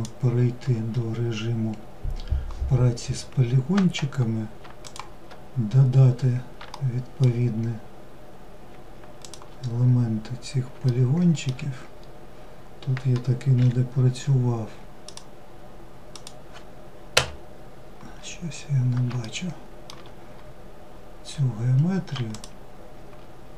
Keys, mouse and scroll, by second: 4.1 shift+click, 5.0-5.6 scroll up 2, 6.0 shift+middle click, 6.9-7.6 scroll up 2, 8.5 shift+click, 9.4-10.1 scroll up 1, 10.1 shift+middle click, 11.1-12.8 scroll up 2, 12.8 k, 17.4-18.5 scroll up 2, 18.5-19.6 shift+middle drag, 19.6-21.3 scroll up 1, 21.6 shift+click.